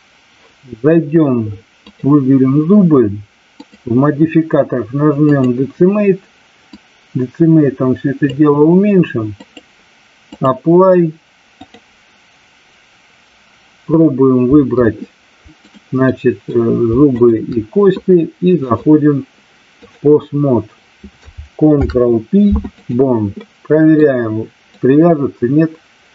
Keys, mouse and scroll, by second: 3.6-5.5 drag, 6.8-8.4 drag, 9.4-10.5 drag, 11.5-13.4 drag, 15.5 click, 16.1 middle click, 17.1 shift+click, 18.6-19.9 drag, 21.6 ctrl+p, 23.4-24.0 middle drag, 24.8-26.1 drag.